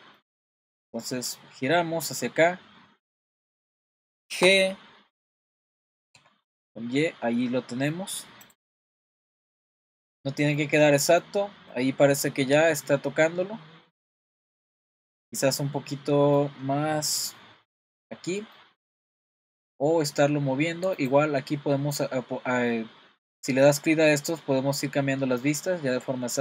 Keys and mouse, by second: 0.2-0.8 middle drag, 1.3-2.2 middle drag, 4.4 g, 8.8-9.9 middle drag, 10.0-10.7 middle drag, 10.8-11.2 middle drag, 11.7-12.2 middle drag, 12.5-14.2 middle drag, 14.5-16.4 middle drag, 17.4-18.1 middle drag, 18.6-19.3 middle drag, 21.0 click.